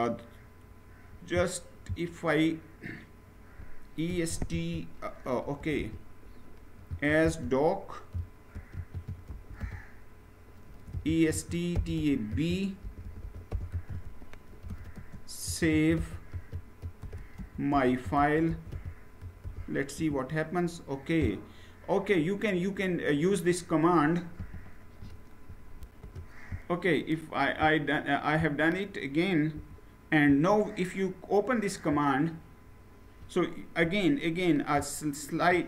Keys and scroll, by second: 3.8-4.2 typing, 5.3-19.1 typing, 19.7 Return, 25.5 shift+F9, 29.4 Return.